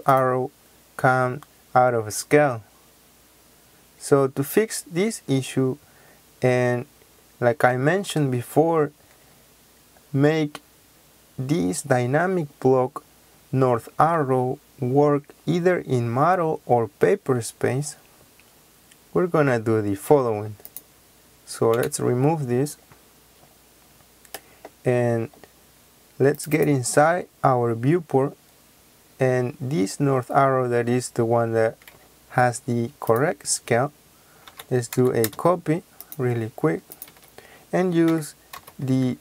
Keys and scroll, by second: 21.7 Delete, 34.4-35.1 typing, 37.0 Escape, 38.0-39.2 typing.